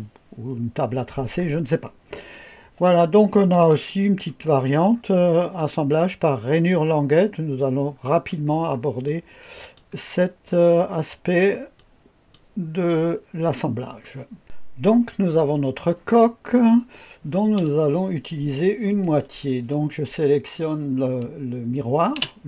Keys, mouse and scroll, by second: 3.6 click, 4.9-5.6 scroll up 2, 5.6-6.7 drag, 7.9 scroll down 2, 8.5 scroll down 1, 9.0-9.9 drag, 10.1-10.6 scroll down 1, 10.9-11.4 drag, 11.8-12.4 drag, 13.2-13.9 scroll up 2, 13.9 scroll down 2, 14.4 Delete, 14.4 Escape, 14.4-15.0 drag, 14.4 space, 14.4 KP_0, 15.2 scroll up 1, 15.5-17.6 scroll down 1, 16.1-17.6 drag, 20.4 click, 22.1 space.